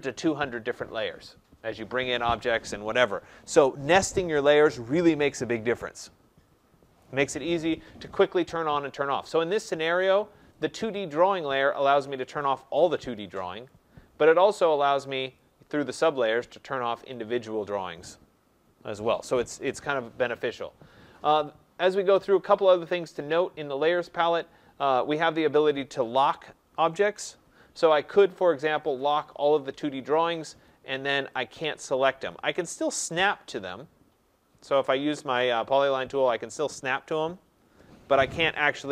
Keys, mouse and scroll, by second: 9.6 click, 10.6 click, 12.4 click, 13.7 click, 15.4 click, 16.1 click, 17.1 click, 17.7 click, 29.0 click, 30.7 click, 31.6 click, 32.3 click, 33.1 click, 35.3 click, 38.8 Escape.